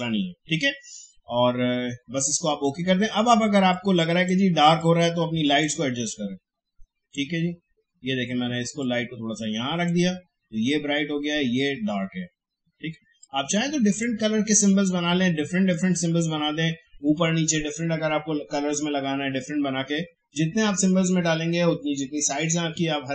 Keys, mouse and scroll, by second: 2.4-12.4 drag, 13.2-18.2 drag.